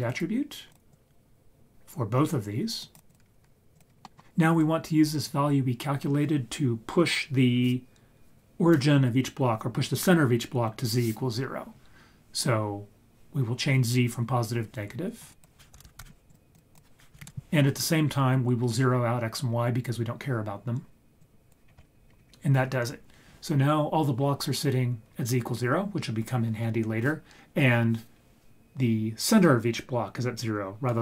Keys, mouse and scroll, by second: 0.9-2.3 drag, 2.8 click, 3.1-3.8 drag, 4.0 middle click, 4.6 click, 15.2-16.3 drag, 16.7 click, 21.2-21.5 drag, 21.7-22.0 scroll down 5, 22.0-22.7 scroll up 7, 25.1-25.7 scroll down 3.